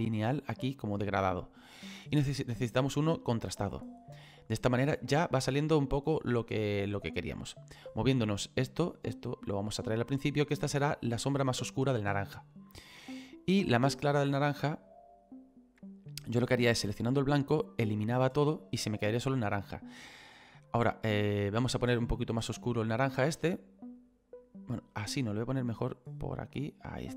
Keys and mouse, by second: 1.9 click, 3.0 click, 5.8 click, 7.1 click, 12.5 click, 13.8 click, 15.8 click, 18.0 click, 21.2 click, 23.1 click, 25.7 click.